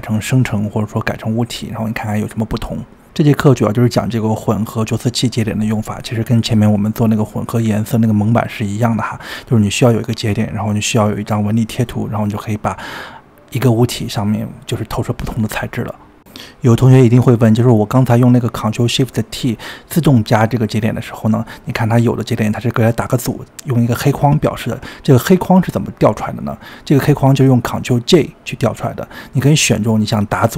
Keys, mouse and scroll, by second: 1.4 click, 3.0-6.0 middle drag, 6.7-7.3 scroll up 4, 7.3-9.6 middle drag, 9.6-9.9 scroll down 4, 9.9-12.4 middle drag, 12.4-13.1 scroll down 3, 13.1 ctrl+shift+middle click, 14.1-15.3 typing, 14.5 click, 16.1-17.1 middle drag, 17.1 click, 17.7 click, 19.0-19.7 scroll down 7, 19.7 drag, 20.5 click, 21.2 click, 21.7-23.4 shift+middle drag, 23.6-24.8 scroll down 4, 24.8-25.4 scroll up 12, 26.3-28.0 shift+middle drag, 28.7-30.0 scroll down 9, 30.0 click.